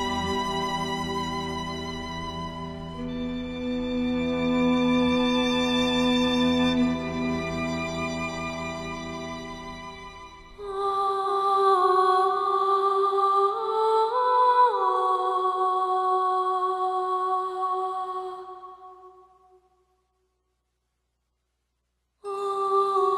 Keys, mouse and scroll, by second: 2.5 space, 2.8 click, 2.9 space, 4.2 click, 13.2 click, 15.4 alt+scroll up 1, 16.9-21.5 drag, 20.4-21.3 click, 21.5-21.9 alt+scroll up 1, 21.9 click.